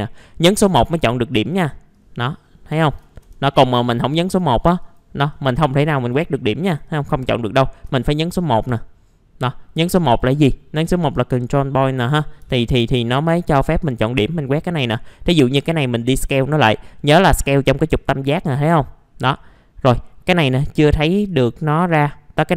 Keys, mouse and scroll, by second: 0.5 alt+middle click, 1.3 click, 2.8 ctrl+z, 3.5-6.8 drag, 7.8 1, 12.2 middle click, 12.3 scroll down 1, 12.4 f, 13.0-13.4 scroll down 1, 13.4 middle click, 13.8 click, 14.8 r, 16.0-19.5 drag, 19.5 middle click, 21.3-22.5 drag.